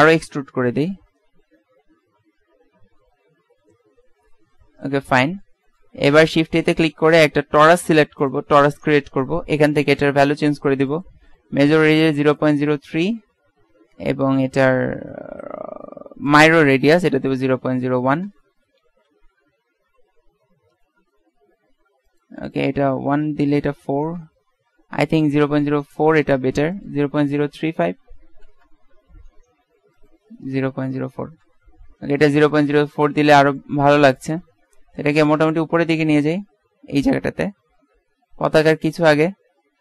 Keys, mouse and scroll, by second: 0.8-2.7 drag, 5.3 middle click, 7.2 shift+a, 11.0-13.0 drag, 16.4-18.4 drag, 20.2 KP_Decimal, 22.2-23.9 drag, 29.4 middle click, 35.3-37.1 drag, 37.8 KP_Decimal.